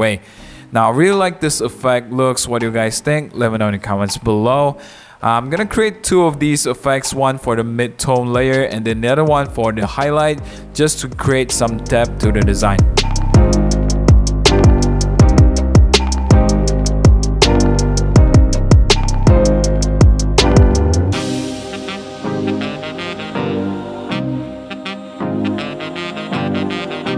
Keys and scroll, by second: 1.4 Page_Up, 1.6 Page_Up, 3.8-4.7 typing, 8.3 1, 8.6 5, 12.8-14.1 typing, 13.8 Up, 14.0 Return, 15.4 super+z, 15.6 super+0, 15.6 super+-, 16.1 super+1, 16.1 super+0, 16.1 super+-, 16.4 super+1, 19.0 super+0, 19.1 super+-, 19.2 super+1, 19.3 super+j, 20.0-21.4 typing, 21.6 super+j, 23.1-25.9 typing.